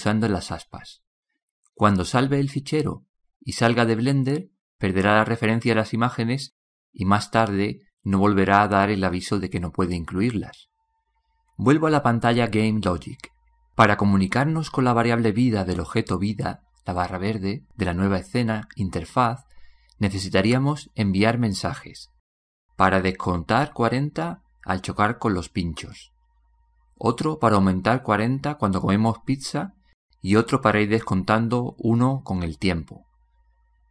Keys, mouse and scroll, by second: 0.8-4.7 drag, 15.1-16.3 drag.